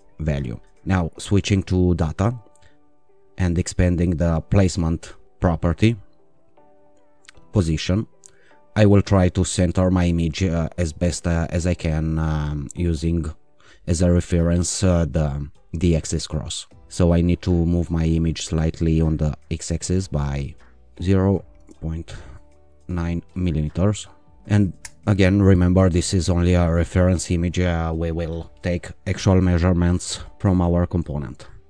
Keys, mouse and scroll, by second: 1.6 click, 4.6 click, 7.4 click, 18.4 click, 19.7 Up, 20.2 Down, 20.7 BackSpace, 21.6 ., 22.7 9, 24.8 Return.